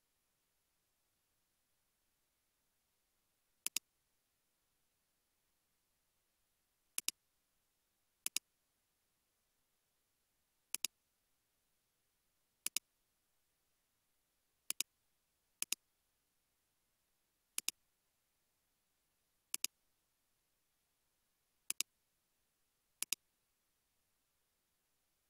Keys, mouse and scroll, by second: 5.0-6.1 typing, 8.7 scroll down 1, 8.9 scroll up 1, 9.6 typing, 11.7 scroll down 1, 11.9 scroll up 1, 12.6 typing, 16.4 typing, 20.8 typing, 24.0-24.9 typing, 25.0 Return.